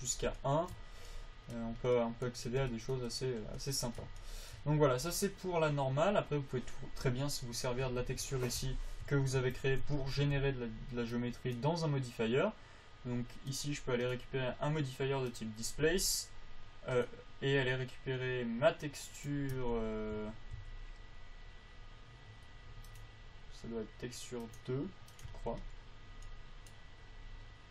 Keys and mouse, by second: 0.3 click, 2.9-5.3 drag, 8.5 Tab, 9.0 Tab, 9.4 Tab, 9.8 Tab, 10.2 Tab, 10.6 Tab, 11.9-13.7 drag, 13.9-17.3 drag, 19.9 Tab, 20.5 a, 20.9 a, 25.6 Tab.